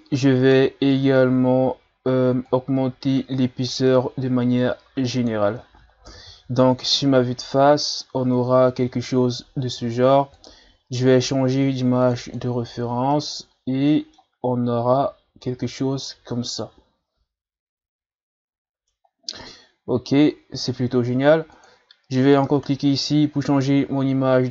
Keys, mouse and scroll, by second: 0.9-1.2 scroll down 4, 1.2-1.5 scroll up 1, 2.5-5.5 drag, 6.1 KP_1, 6.6 a, 7.9-9.2 scroll up 3, 9.2 scroll down 1, 10.4-12.1 drag, 12.3 click, 13.1-15.6 middle drag, 15.6-16.2 ctrl+scroll down 1, 16.3-19.3 middle drag, 21.5-24.5 drag.